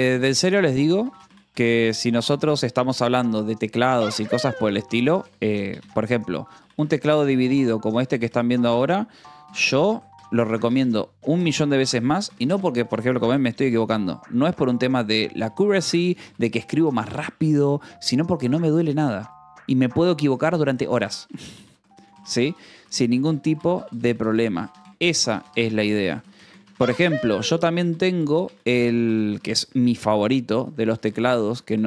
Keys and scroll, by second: 0.0-0.1 typing, 2.6 Return, 2.8 space, 4.6 a, 6.6 p, 7.3 i, 8.6-9.9 typing, 14.0 Tab, 17.8-19.0 typing, 20.7 t, 30.5 r.